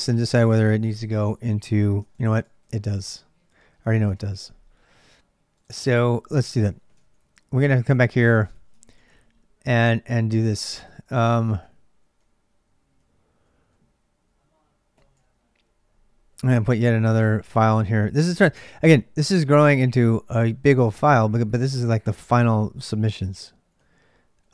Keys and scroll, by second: 0.0-24.5 typing, 3.8 Return, 6.8 ctrl+a, 7.0 ctrl+a, 8.6 ctrl+[.